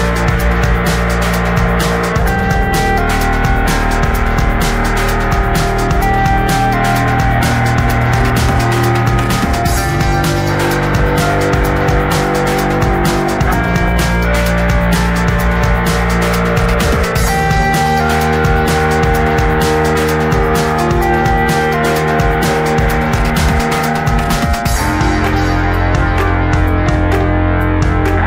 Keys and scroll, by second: 11.1 space.